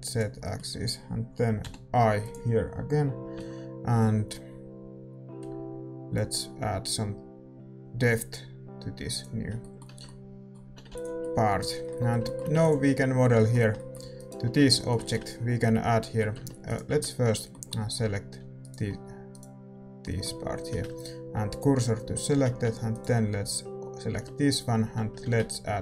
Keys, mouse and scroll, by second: 0.3-6.1 middle drag, 1.6 i, 6.1 F6, 9.5-22.0 middle drag, 9.8 Tab, 10.6 a, 11.1 ctrl+s, 14.1-16.0 right drag, 14.5 Tab, 16.6-21.5 right drag, 18.3 a, 21.5 shift+s, 22.0 a, 22.6 Tab, 22.9-24.8 right drag, 24.8 a.